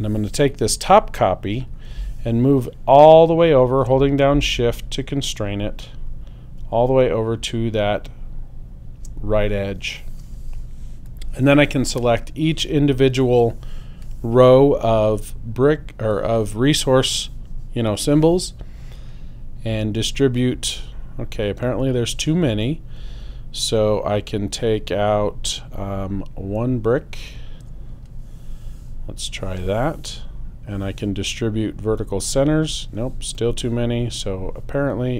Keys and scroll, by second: 27.6 BackSpace.